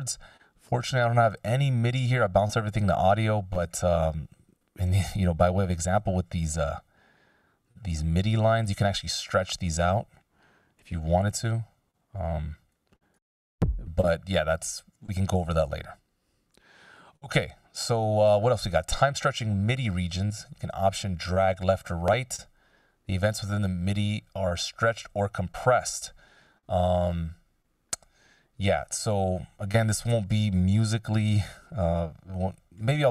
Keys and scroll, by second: 11.1 F16, 11.3 Delete, 16.5 p, 30.9 Delete.